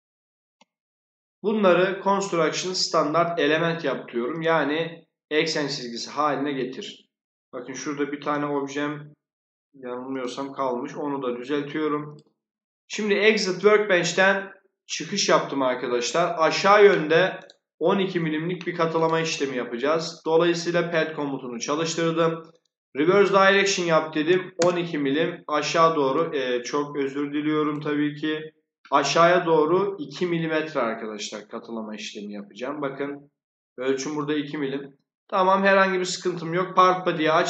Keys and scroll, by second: 23.8-24.7 typing.